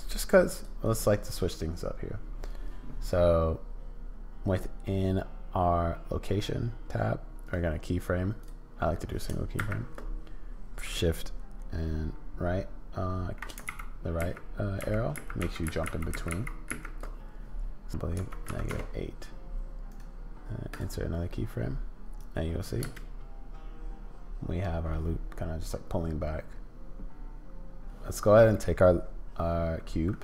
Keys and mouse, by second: 0.5 click, 0.8 click, 7.4-8.6 drag, 9.5 shift+Right, 13.7 shift+Left, 14.2 shift+Right, 14.8 shift+Left, 15.4 shift+Left, 15.4 shift+Right, 15.6 shift+Right, 15.8 shift+Left, 16.1 shift+Right, 16.3 shift+Left, 16.7 shift+Right, 17.9-19.5 drag, 20.0 click, 22.2 click, 22.8 space.